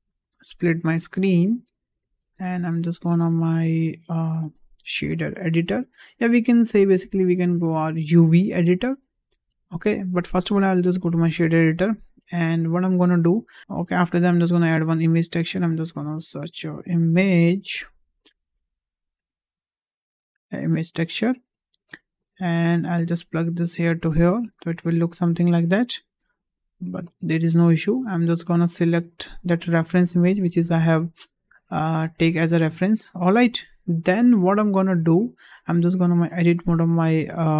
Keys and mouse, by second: 0.2-1.4 drag, 0.9 middle click, 1.7 click, 3.3-10.9 drag, 11.9 click, 12.3 n, 13.5 click, 14.6 shift+a, 22.1 middle click, 22.9-24.3 drag, 25.8 shift+middle click, 27.2 shift+middle click, 27.9 shift+middle click, 28.7-30.0 drag, 32.8 shift+middle click, 33.9 `, 35.1-35.6 shift+middle drag, 35.9 Tab.